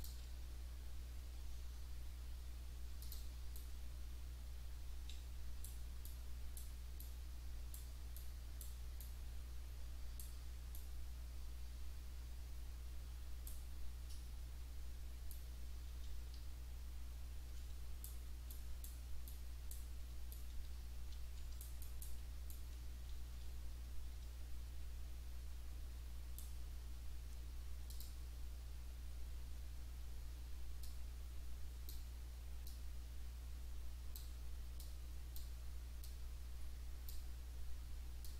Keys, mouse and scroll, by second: 0.0 click, 3.0 click, 3.6-5.8 right drag, 6.1 right click, 7.0-8.0 right drag, 8.2-8.8 right drag, 9.0 right click, 9.6-10.4 middle drag, 10.7-13.7 right drag, 15.3 right click, 15.5 middle drag, 15.6 right click, 15.7 middle click, 16.4 right click, 16.4 w, 16.7-17.9 middle drag, 17.9 right click, 18.0 middle click, 18.0 right click, 18.1 middle click, 18.5 right click, 19.3 right click, 20.3 right click, 20.6 right click, 20.8 right click, 21.1 w, 21.4 right click, 22.5 right click, 22.8 middle drag, 22.9 right click, 23.0 middle click, 23.1 w, 23.8 middle drag, 24.3 right click, 24.4 middle click, 24.4 right click, 25.1-26.6 middle drag, 27.9 click, 30.8-32.1 drag, 32.7-34.4 drag, 34.8 click, 36.0-37.3 drag, 38.2-38.3 drag.